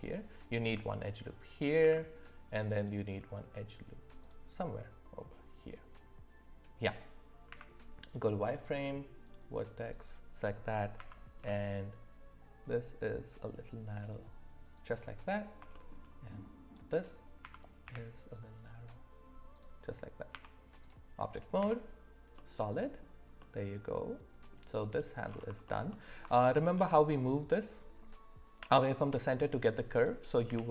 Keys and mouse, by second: 1.8 ctrl+r, 7.5 z, 9.2 click, 9.9 click, 10.9 s, 15.7 shift+middle click, 16.4 click, 17.4 s, 20.3 Tab, 21.6 z, 22.3-23.0 middle drag, 23.4-24.5 middle drag, 24.9-25.4 drag, 26.4 shift+middle drag.